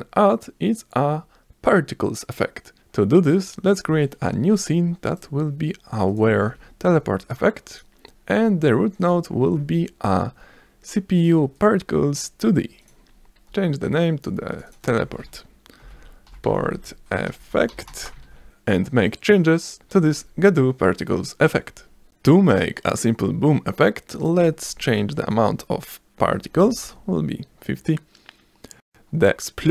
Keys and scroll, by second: 2.8 z, 7.7 v, 15.2-19.1 typing, 26.0-27.0 typing.